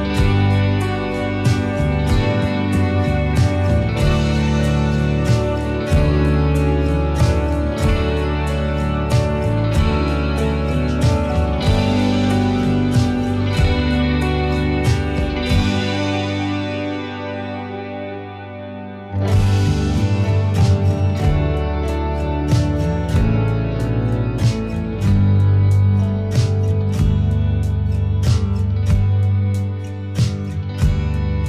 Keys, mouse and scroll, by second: 0.0 click, 1.0 click, 2.0-3.5 middle drag, 3.3 click, 4.3-5.6 middle drag, 5.6 click, 7.1 middle click, 7.6 click, 8.2 click, 9.5 click, 10.7 middle click, 11.6 middle click, 12.8 alt+h, 13.2-16.9 middle drag, 18.6-20.6 middle drag, 20.6 h, 21.8-23.0 middle drag, 22.7-23.4 drag, 23.9 middle click, 24.8-25.7 drag, 25.9 middle click, 26.5 click, 27.0 click, 27.8 middle click, 28.7 click, 29.2-30.3 drag, 30.0 middle click, 30.7 click.